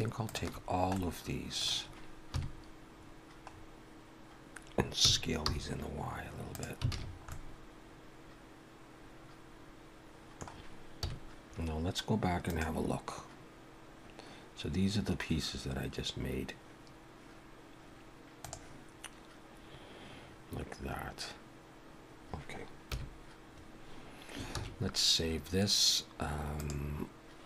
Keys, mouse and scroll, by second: 0.9 middle click, 2.3 KP_3, 3.5-3.9 scroll up 1, 5.1 s, 6.9 alt+a, 7.0-7.4 scroll down 3, 7.3 middle click, 11.0 KP_1, 22.9 KP_1, 24.5 ctrl+s, 26.6 click.